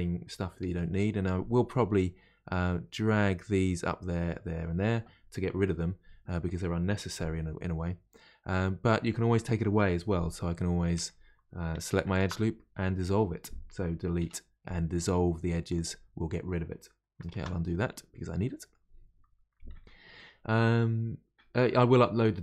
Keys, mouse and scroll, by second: 11.7 2, 12.1 alt+click, 14.2 Delete, 17.3 ctrl+z, 18.5-21.5 middle drag.